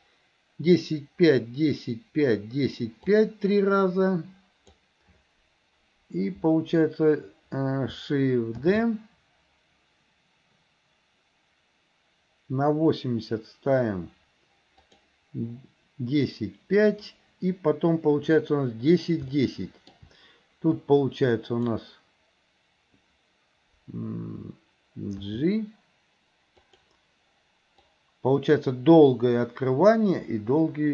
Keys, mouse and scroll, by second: 3.1-4.8 drag, 8.8 shift+d, 19.4 shift+middle click, 20.8-21.6 drag, 25.3 g, 28.0-30.9 drag.